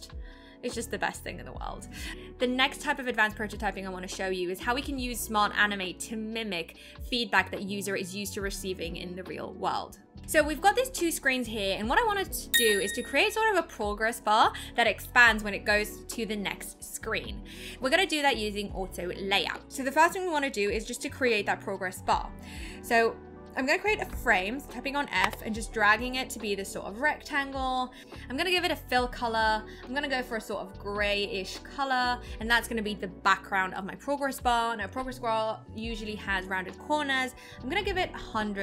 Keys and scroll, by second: 25.2 f.